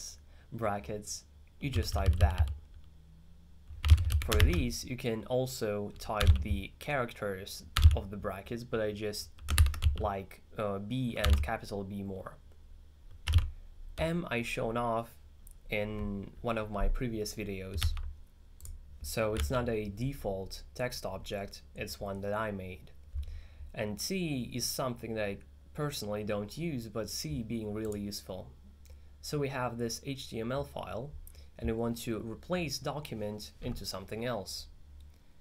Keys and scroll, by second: 1.8-2.4 typing, 3.6-4.9 typing, 6.0-7.8 typing, 9.4-11.8 typing, 13.3 4, 13.6 j.